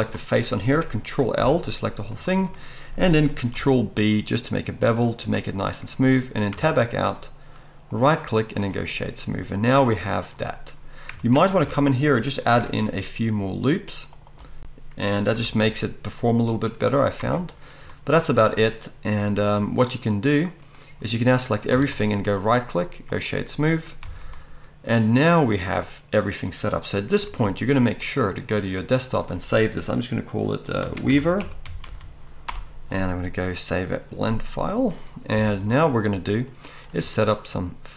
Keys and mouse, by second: 0.0 click, 0.1-2.6 middle drag, 1.4 ctrl+l, 2.6-5.4 drag, 3.6 ctrl+b, 5.4-7.9 middle drag, 6.5 Tab, 7.9-10.7 right drag, 10.7-12.0 middle drag, 11.5 Tab, 12.0-20.2 ctrl+right drag, 12.5 ctrl+r, 15.3 g, 17.1 Tab, 21.7 a, 24.0 alt+a, 27.1-37.9 ctrl+right drag, 27.3 ctrl+s.